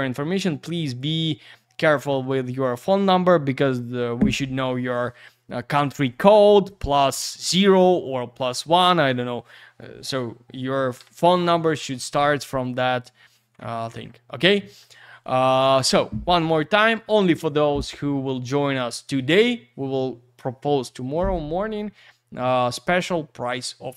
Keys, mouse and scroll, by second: 0.9 click, 1.0 click, 12.6 click, 13.9-14.5 scroll down 1, 14.5-23.9 scroll up 2.